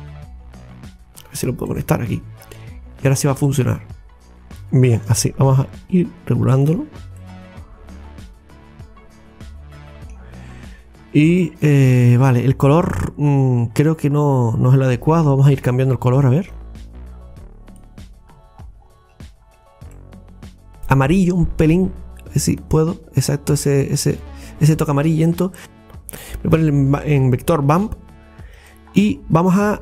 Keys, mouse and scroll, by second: 4.5 click, 7.0 scroll up 1, 7.2-10.3 middle drag, 12.7 click, 18.8-20.0 scroll down 1, 20.0 middle click, 20.8 click, 25.7 click.